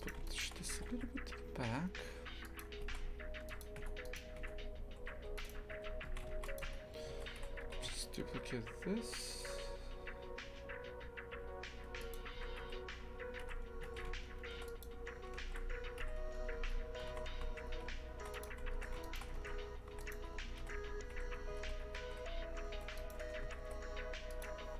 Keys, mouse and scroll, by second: 0.0 right click, 0.8 g, 2.9 shift+f, 3.8 Tab, 4.1 right click, 4.4 Tab, 5.2 2, 5.4 right click, 5.7 f, 6.6 Tab, 7.1 shift+d, 7.7 g, 13.9 shift+f, 16.6 Tab, 17.1 shift+f, 18.8 a, 19.0 alt+shift+right click, 19.4 ctrl+x, 19.9 3, 20.0 right click, 20.6 h, 21.6 ctrl+z, 21.8 ctrl+z, 23.0 right click, 23.5 g.